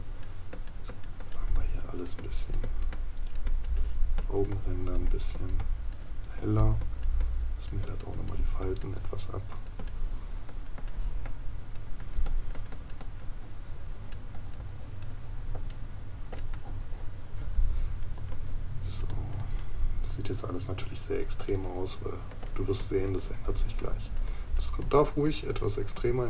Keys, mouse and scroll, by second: 15.7 right click, 21.5 right click.